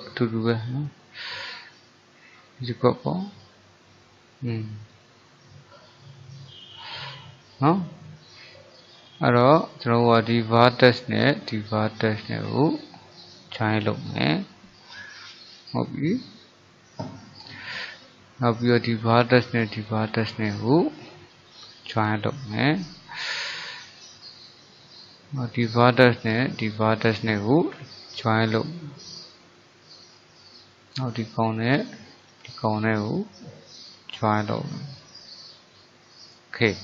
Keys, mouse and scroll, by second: 0.1-2.3 middle drag, 2.3 click, 3.5-5.0 middle drag, 5.0 click, 5.8 middle click, 6.5 click, 7.0-8.9 middle drag, 8.9 click, 9.4-10.6 middle drag, 10.6 click, 12.3 shift+click, 13.6 j, 14.6-17.7 middle drag, 18.5 click, 19.9 shift+click, 21.6 j, 22.6-25.6 middle drag, 25.6 click, 26.7 shift+click, 27.8 j, 28.7-30.9 middle drag, 30.9 click, 32.3 shift+click, 33.9 j, 34.8-36.8 middle drag.